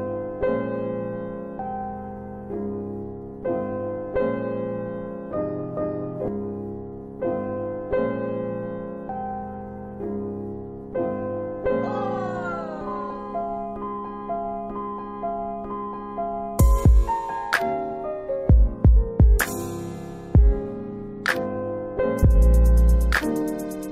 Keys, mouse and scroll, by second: 1.6 click, 2.6 alt+w, 3.1 alt+w, 3.5 scroll up 1, 4.1 scroll down 1, 5.0 ctrl+alt+middle click, 7.2 ctrl+alt+middle click, 7.3 click, 9.5 click, 10.1 alt+w, 11.0 alt+w, 12.6 middle click, 12.6 4, 13.1 click, 15.1 ctrl+click, 21.1 click, 22.7 click, 23.4 middle click, 23.7 F4, 23.8 click.